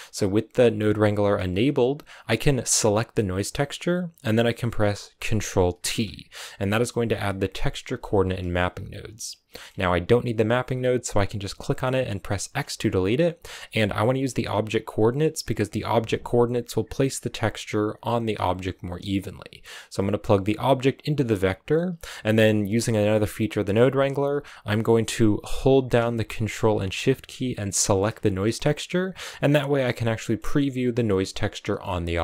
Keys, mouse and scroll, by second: 2.7-5.0 drag, 5.7 ctrl+t, 6.3-9.3 middle drag, 9.4 middle click, 9.5-9.9 scroll up 2, 9.9-11.9 drag, 12.9 click, 15.2 click, 27.7 ctrl+shift+click, 28.4-28.8 scroll down 2, 29.3-31.0 middle drag, 31.0-31.6 scroll up 1, 31.6 scroll up 1, 31.7-32.2 middle drag.